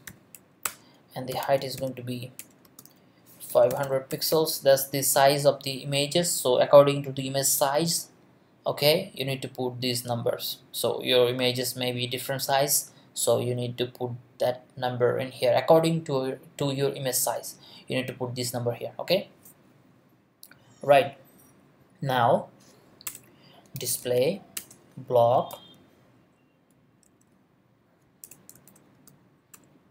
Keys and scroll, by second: 0.0-5.1 typing, 0.6 Return, 2.4 Return, 23.1 Return, 23.5-25.3 typing, 24.5 Return, 25.5 Down, 26.1 Return, 27.0 Left, 28.2-29.9 typing.